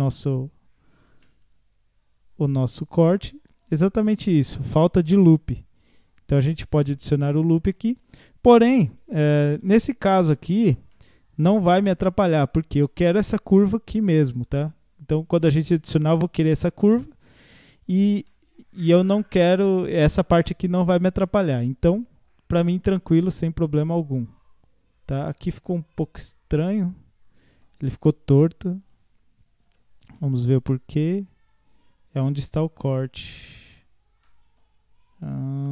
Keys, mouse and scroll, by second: 1.1 ctrl+r, 9.5 ctrl+z, 10.2 Tab, 10.6-10.9 scroll down 1, 10.9-13.9 middle drag, 16.1 scroll up 2, 16.6-20.8 middle drag, 20.8-21.2 scroll down 1, 21.2-24.2 middle drag, 27.5-28.8 middle drag, 28.8 click, 29.7 Tab, 30.2-33.2 middle drag, 33.8 scroll up 1, 34.3 middle click, 34.7 scroll down 1, 35.3-35.7 middle drag.